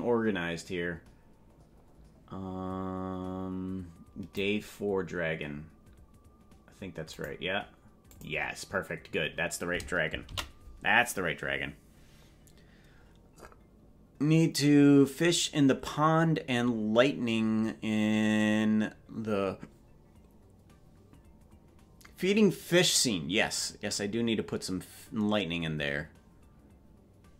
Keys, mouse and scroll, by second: 7.5 click, 8.5 click, 13.6 ctrl+s.